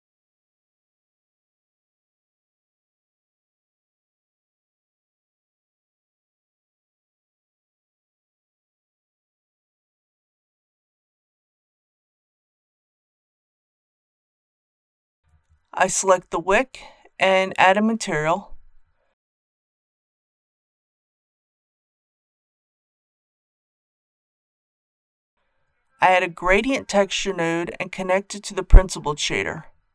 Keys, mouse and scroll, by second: 2.6 scroll up 1, 3.7-7.3 middle drag, 7.3 scroll down 1, 15.2-15.6 scroll up 1, 15.6 click, 18.7-19.1 typing, 19.4 Return, 20.7 shift+middle click, 22.5-25.7 scroll down 1, 26.1 shift+a, 28.9-29.9 drag.